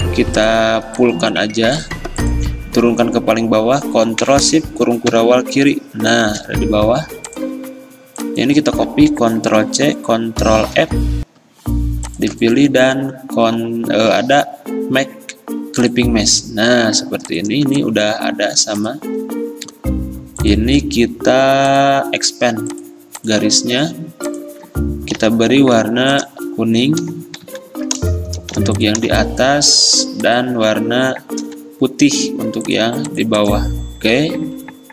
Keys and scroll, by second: 8.8 ctrl+shift+z, 9.7 ctrl+c, 10.9 ctrl+f, 26.0 i, 27.5 x, 28.6 v, 31.5 d.